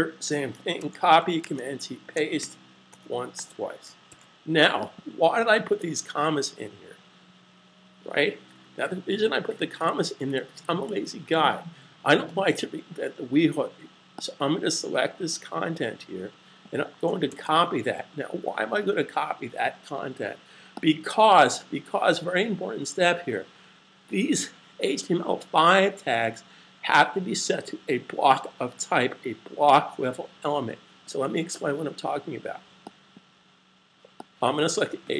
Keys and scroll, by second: 0.7-1.6 typing, 2.3 super+v, 4.1 s, 17.1 super+c.